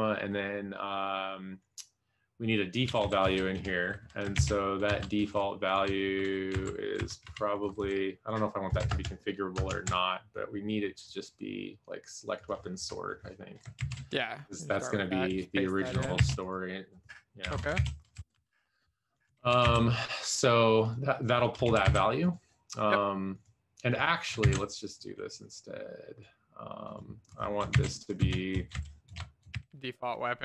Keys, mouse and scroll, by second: 3.2 Left, 3.2 shift+', 4.7 ctrl+s, 4.8 Up, 5.2 Down, 16.6 ctrl+s, 17.9 ctrl+s, 18.1 Left, 18.3 Up, 19.3 alt+shift+f, 20.2 ctrl+s, 22.0 ctrl+s, 24.7 ctrl+c, 28.1 ctrl+v, 28.1 space, 28.5 Left, 29.3-30.4 typing.